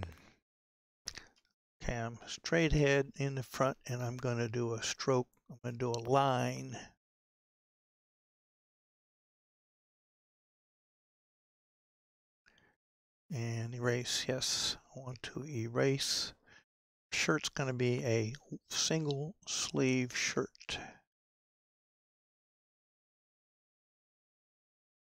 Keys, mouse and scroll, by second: 1.3 KP_1, 9.4-23.7 drag.